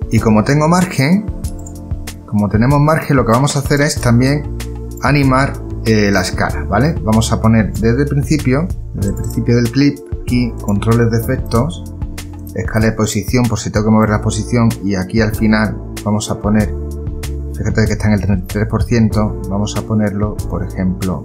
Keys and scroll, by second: 1.7 space.